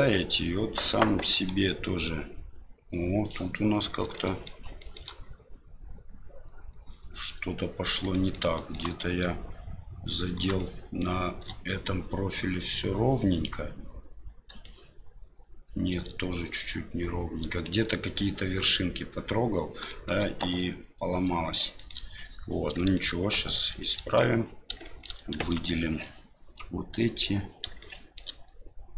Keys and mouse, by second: 1.3 g, 4.3 middle click, 4.9 shift+middle click, 8.2 shift+middle click, 8.5 shift+middle drag, 10.6-11.1 shift+middle drag, 14.8-15.9 shift+middle drag, 20.0 shift+middle click, 22.9 shift+middle click, 23.6 right click, 24.0 Tab, 24.8 middle click, 25.3 shift+z, 26.0 click, 27.8 shift+middle click.